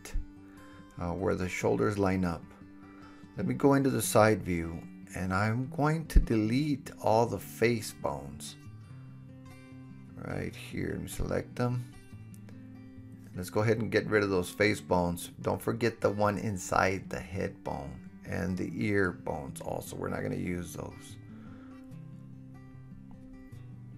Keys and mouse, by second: 3.0 KP_3, 5.8 ctrl+a, 10.0 Tab, 10.7-16.2 middle drag, 14.5 Delete, 16.2 click, 16.4 click, 16.8 Delete, 19.1 shift+click, 19.9 Delete, 21.3-23.9 middle drag.